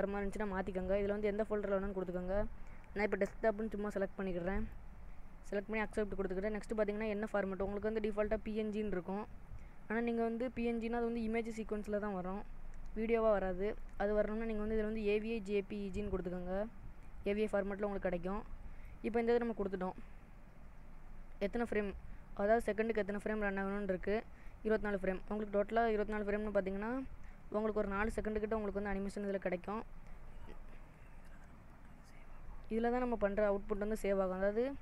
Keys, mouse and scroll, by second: 7.2 click, 11.2-12.5 scroll down 3, 13.8 click, 18.8-19.8 scroll down 3, 19.8-21.5 scroll up 5, 22.8 click, 34.3-34.8 scroll down 2.